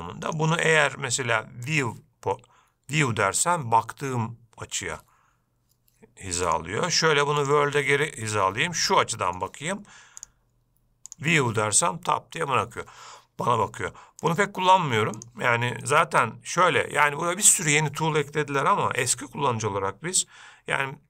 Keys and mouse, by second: 0.4-2.0 drag, 6.7-7.7 drag, 8.4-9.6 middle drag, 10.5-11.3 drag, 14.5-15.4 drag, 16.0-16.7 middle drag.